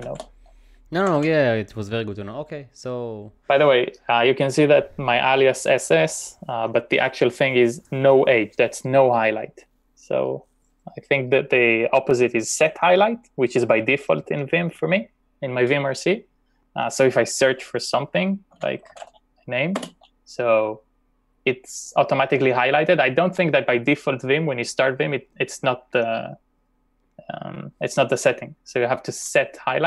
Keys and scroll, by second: 0.1 ctrl+o, 1.1 typing, 18.3-19.5 typing, 20.0 Return.